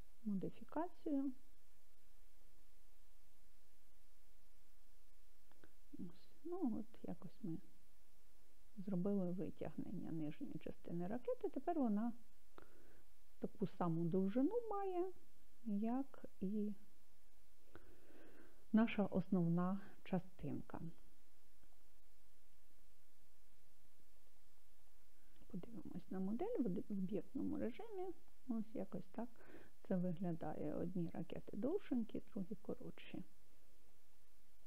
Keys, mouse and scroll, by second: 1.2 e, 3.5 z, 12.0 click, 21.4 scroll down 1, 24.2 click, 26.7-33.6 middle drag.